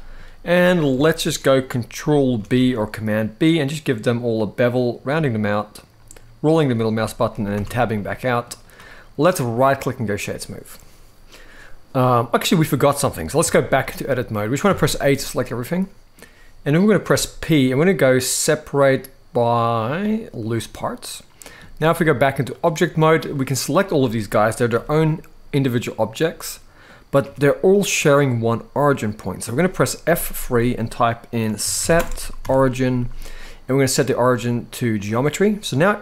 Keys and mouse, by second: 0.3 middle click, 0.8 shift+middle click, 2.1 ctrl+b, 7.0 middle click, 7.6 Tab, 7.6-8.1 middle drag, 9.0-9.9 right drag, 10.4-12.1 middle drag, 13.2 Tab, 13.6 middle click, 14.4 a, 15.4 middle click, 16.8 p, 20.7 middle click, 21.8 click, 22.6 middle click, 23.3-23.7 drag, 24.0-24.3 middle drag, 24.4 g, 25.6-26.6 middle drag, 26.9 g, 29.8 F3, 35.3-35.7 middle drag.